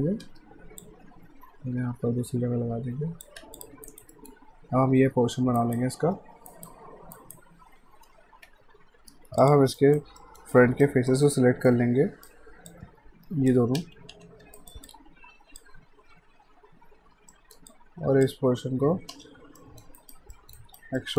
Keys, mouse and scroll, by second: 0.8 click, 3.4 q, 3.6 click, 3.9 alt+right click, 4.1 middle click, 5.6 right click, 8.4 F5, 9.4 click, 9.8 alt+right click, 10.2 alt+middle click, 10.5 alt+right click, 11.1 alt+middle click, 11.7 right click, 12.7 click, 13.8-14.9 typing, 14.6 alt+right click, 14.9 alt+click, 17.3 alt+middle click, 17.7 alt+click, 19.1 space, 19.6 alt+middle click, 20.0 alt+right click, 20.3 middle click, 20.6 right click, 21.0 middle click.